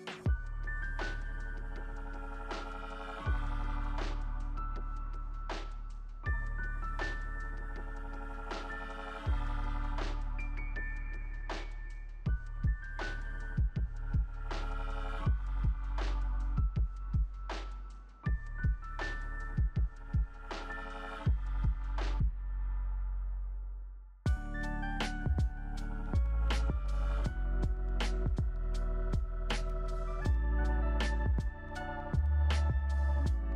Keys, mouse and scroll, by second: 4.7 5, 4.8 Return, 6.8 3, 8.5 2.